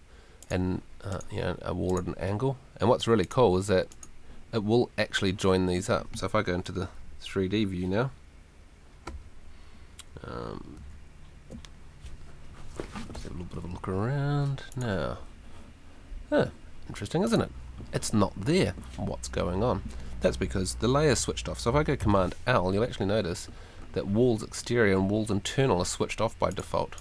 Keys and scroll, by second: 10.7 F3, 22.0 super+l.